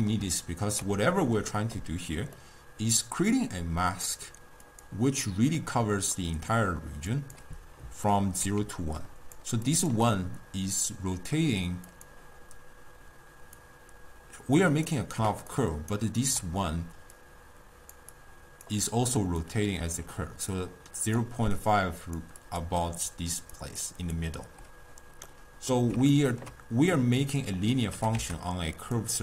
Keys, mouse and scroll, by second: 3.9-4.7 scroll down 1, 4.7 click, 5.6 scroll up 1, 5.7-7.2 middle drag, 7.2 click, 8.1 scroll up 1, 8.1-8.7 ctrl+middle drag, 8.7 d, 8.8 click, 9.4 d, 9.8 click, 10.0 d, 11.9 click, 13.6-15.3 drag, 15.3-19.8 typing, 15.6 right click, 17.2 click, 18.2 click, 19.2 click, 20.6 click, 21.2-25.3 typing, 21.7 click, 22.0 click, 22.5 click, 22.9 click, 23.8 click, 25.3 scroll up 1, 25.4-26.1 middle drag, 26.2-27.0 ctrl+middle drag, 27.0-28.0 drag, 28.0 g.